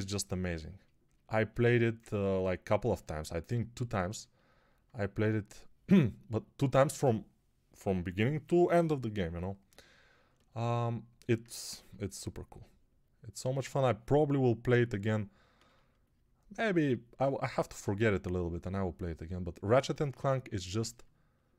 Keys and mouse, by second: 11.6 1.